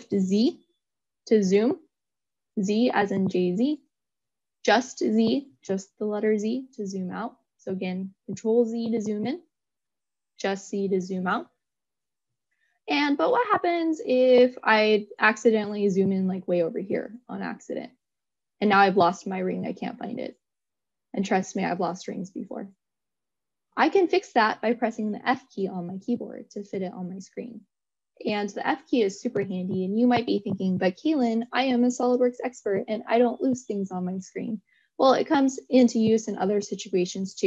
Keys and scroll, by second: 0.8 shift+z, 8.3 shift+z, 10.7 z, 23.0 f.